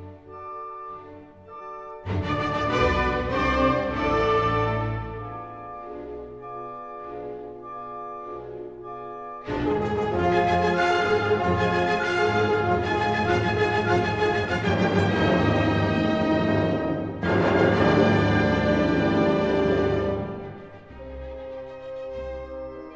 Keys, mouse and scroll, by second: 0.5-1.6 drag, 3.0-4.1 drag, 5.6 click, 6.1-7.4 scroll, 9.7 right click, 15.8 click, 17.2 ctrl+z, 18.1 click, 19.8-20.2 scroll, 22.4 click.